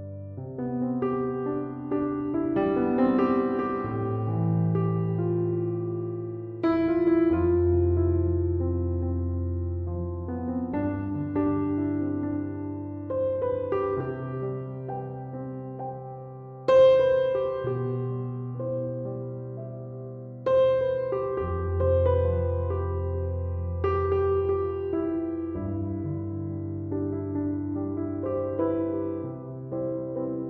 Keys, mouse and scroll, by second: 15.0 BackSpace, 15.8 1, 16.5 Return.